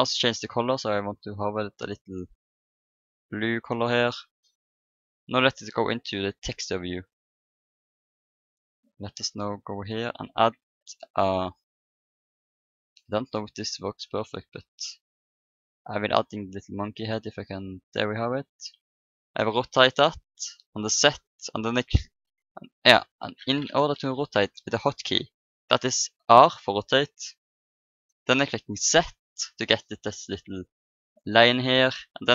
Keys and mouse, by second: 1.5-3.5 drag, 3.4 middle click, 5.2-6.4 drag, 6.6 click, 7.0-9.3 middle drag, 9.3 click, 10.2 shift+a, 18.2-19.5 middle drag, 19.5 r, 26.2 r.